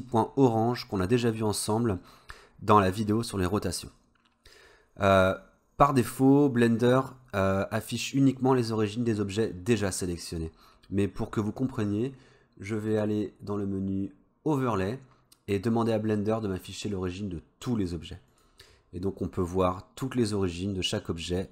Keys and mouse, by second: 12.9-18.7 drag.